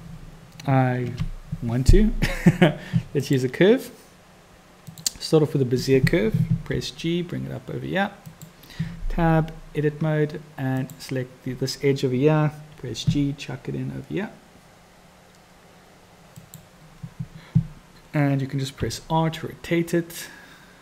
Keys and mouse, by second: 1.0 shift+a, 6.7 g, 9.3 Tab, 10.8-12.3 drag, 12.9 g, 18.8 r.